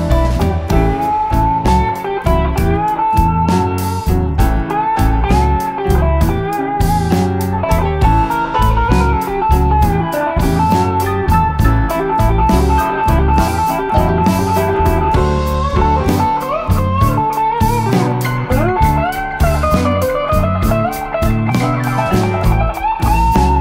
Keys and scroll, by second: 1.5 F1, 2.4 ctrl+d, 3.0 ctrl+*, 10.9 Page_Down, 11.8 Page_Down, 13.2 End, 13.3 Page_Up, 14.5 typing, 20.4-20.8 typing, 21.9 F7, 22.3 F1, 23.1 space.